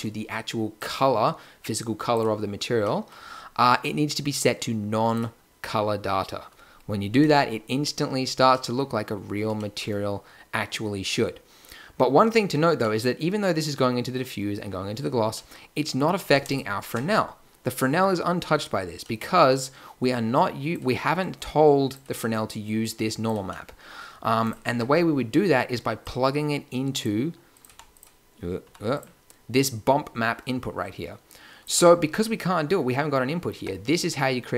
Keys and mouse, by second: 7.7-8.7 middle drag, 9.9 click, 17.2-17.7 drag, 23.4 click, 24.6 Tab, 27.1 click, 27.6 g, 28.6 g, 31.7 Tab, 33.5 Tab.